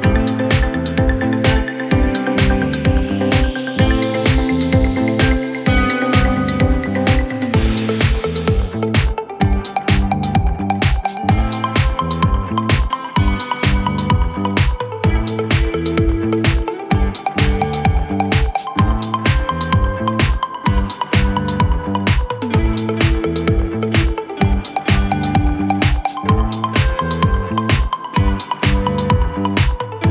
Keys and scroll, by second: 4.5 Delete, 8.5 Delete, 23.5 shift+F2, 23.8 F3.